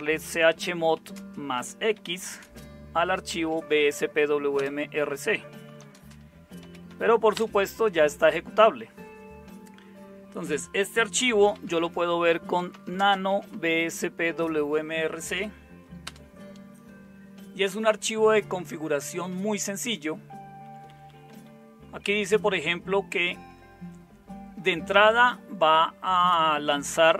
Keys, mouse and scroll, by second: 0.0-6.9 typing, 7.4 Return, 11.3-14.0 typing, 16.1 Return, 20.7 Down, 20.9 Down, 21.0 Down, 21.3 Down, 22.0 Up, 22.3 Up, 25.1 Right, 25.7 Right, 25.8 Right, 26.1-27.1 Right.